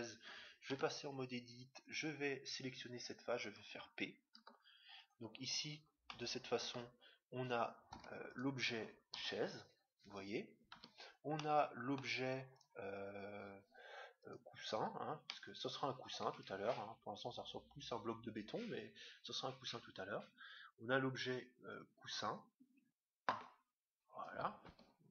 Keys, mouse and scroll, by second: 0.7 Tab, 1.5-3.3 right drag, 4.3 p, 6.0-7.7 middle drag, 7.8 middle click, 7.9 Tab, 8.3-10.0 right drag, 9.1 g, 11.2-13.0 middle drag, 12.5-15.9 right drag, 15.3-16.9 middle drag, 16.6 g.